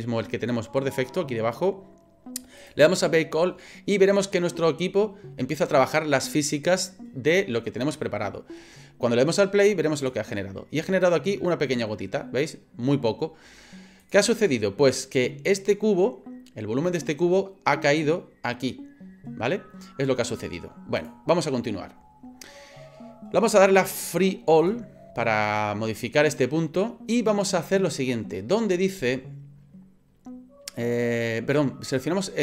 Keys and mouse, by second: 8.2 click, 10.0 click, 14.0 click, 21.0 click, 24.6 click.